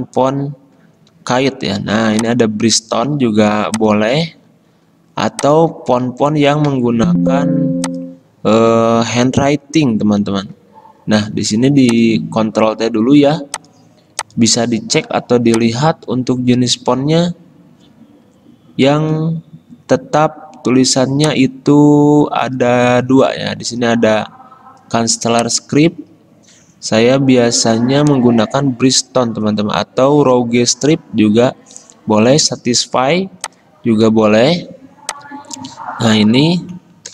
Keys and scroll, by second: 7.2 ctrl+t, 9.2 ctrl+z, 10.4 ctrl+t.